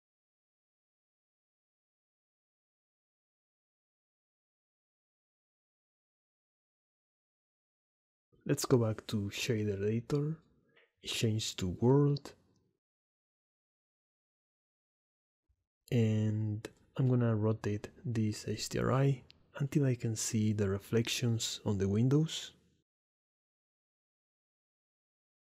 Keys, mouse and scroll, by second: 0.8 shift+d, 0.9 click, 1.9 r, 2.7 drag, 3.0-5.8 typing, 3.3 click, 3.6 click, 3.8 click, 6.2 click, 6.3 middle click, 6.8 shift+click, 7.0 click, 8.3-9.5 drag, 11.7-12.5 drag, 13.5 click, 14.1 click, 14.5 click, 15.7-17.3 drag, 17.7 click, 18.3 click, 18.8 shift+middle click, 19.1 middle click, 20.0 shift+click, 21.6 shift+middle click, 21.7 middle click, 23.4-25.2 middle drag.